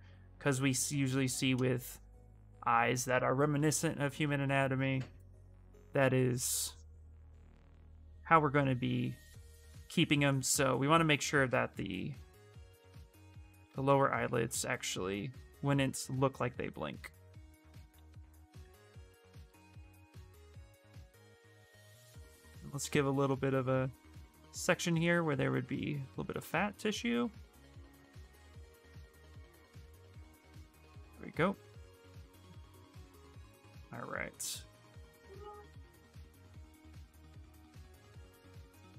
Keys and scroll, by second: 13.6 ctrl+z, 17.9 s, 34.2 s.